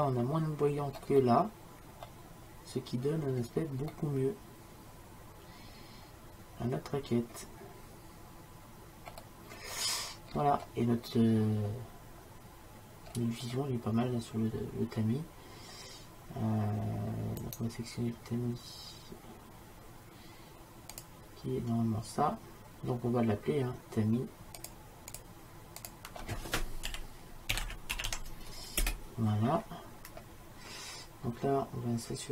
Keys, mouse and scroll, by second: 1.3-3.1 middle drag, 3.5-5.9 middle drag, 9.7-17.5 middle drag, 17.5-19.5 drag, 21.0-23.0 drag, 24.7-27.9 drag.